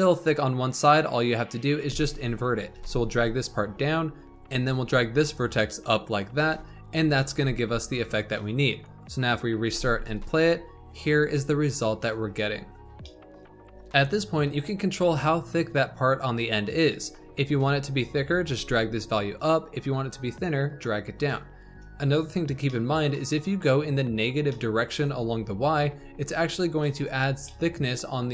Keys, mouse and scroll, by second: 1.2 click, 1.7 Tab, 2.7 g, 4.4 g, 6.3 Tab, 6.7-7.1 scroll up 3, 7.1 shift+middle click, 7.3 Tab, 9.2-9.6 drag, 9.6 space, 12.6 scroll down 1, 12.9-13.7 shift+middle drag, 13.7-16.5 scroll up 3, 16.8 Tab, 18.3 g, 21.5 click, 22.6-25.7 shift+middle drag, 25.7 g, 27.4-28.3 shift+middle drag.